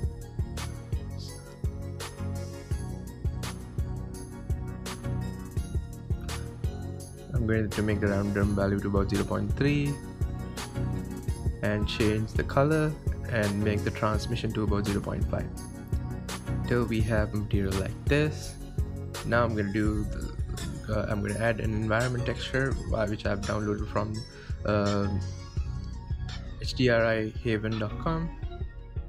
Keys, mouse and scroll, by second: 3.9-5.3 drag, 7.1 click, 7.8-9.0 drag, 9.7 click, 13.0-13.5 ctrl+shift+drag, 16.8-17.5 drag, 18.4-19.0 middle drag, 19.0 KP_0, 19.4 scroll up 5, 19.8 scroll down 3, 20.1-21.4 shift+middle drag, 21.4 shift+a, 23.3-25.2 drag.